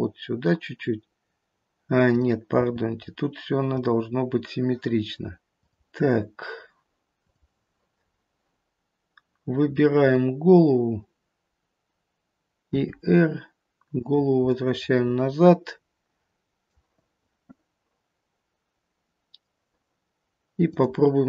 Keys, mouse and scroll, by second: 2.0 click, 2.8 g, 5.4 middle click, 7.3 click, 8.1-9.9 scroll up 1, 9.9 click, 9.9-10.7 scroll up 1, 12.7 r, 14.4 middle click, 20.7 click.